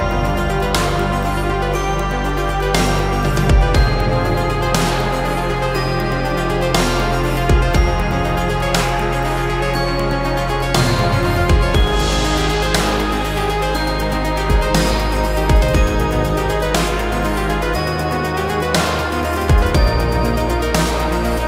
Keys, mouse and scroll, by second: 2.8 Return.